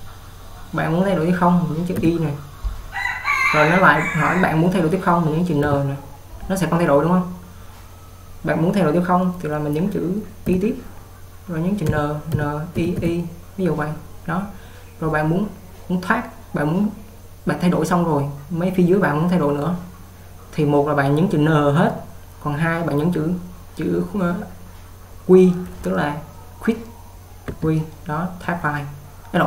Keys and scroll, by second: 2.3 y, 4.8-5.8 typing, 10.3-13.5 typing, 27.8 q.